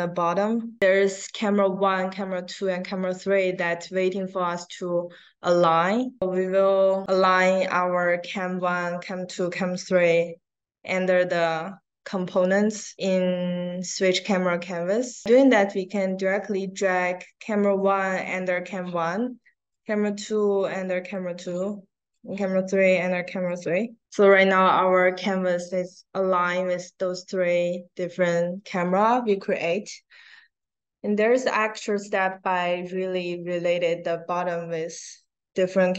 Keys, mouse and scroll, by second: 15.2-18.1 drag, 19.7-21.0 drag, 22.0-23.4 drag, 31.4 click.